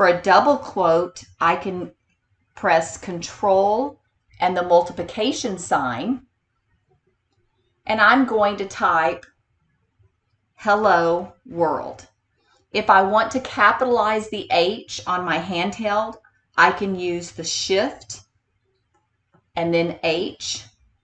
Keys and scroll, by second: 19.0 shift+h.